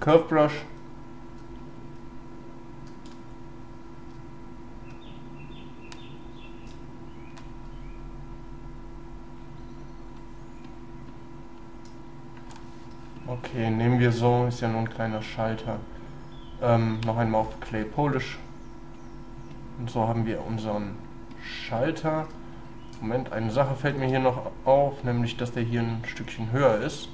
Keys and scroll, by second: 3.1 space.